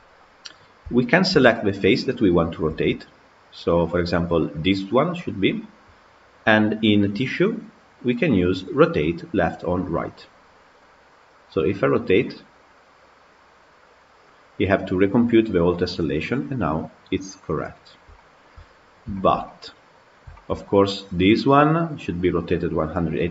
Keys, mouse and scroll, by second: 0.1 scroll up 2, 0.9-1.3 shift+middle drag, 1.3-2.0 scroll down 1, 2.0 click, 2.7 Tab, 3.4 click, 7.3 click, 10.6-15.1 drag, 17.7 scroll up 1, 18.0 shift+middle click, 18.6-19.0 scroll up 5, 19.0 shift+middle click, 19.8-20.2 scroll up 3, 20.2-23.3 shift+middle drag.